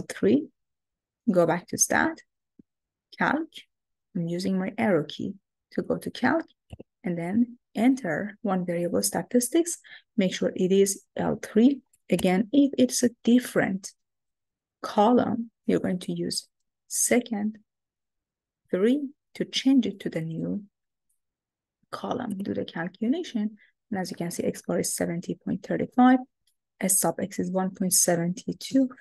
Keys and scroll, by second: 2.7 Right, 6.8 Return, 18.9 3, 20.2 Down, 21.1 Down, 22.4 Return.